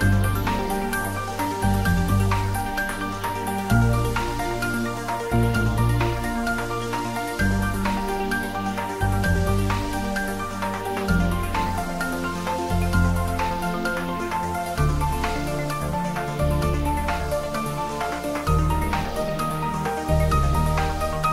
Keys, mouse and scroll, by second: 1.8 click, 2.8 middle click, 3.3 Tab, 3.5-4.8 middle drag, 4.8 click, 5.0 Tab, 6.4 shift+z, 6.6 click, 6.9 shift+z, 7.1-10.1 drag, 10.1 s, 14.0 click, 14.3-16.5 middle drag, 16.5 s, 17.4 click, 17.7 Tab, 19.1 ctrl+middle click, 19.4 ctrl+s, 19.7-21.3 ctrl+middle drag.